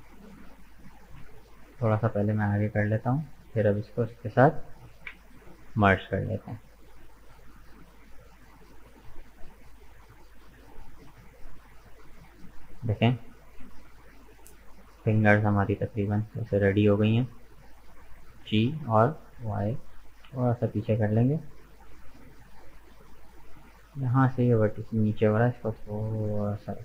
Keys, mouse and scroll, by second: 0.9 g, 3.9 shift+right click, 5.0 m, 6.1 scroll down 2, 6.5-8.4 middle drag, 8.4-8.7 scroll down 2, 8.7-12.8 middle drag, 12.8-13.1 scroll down 2, 13.1-14.9 middle drag, 14.9-16.0 drag, 16.0 right click, 16.4-18.5 middle drag, 18.5 g, 21.5-22.9 middle drag, 22.9 click, 23.9 right click, 24.3-25.7 middle drag, 25.7 g.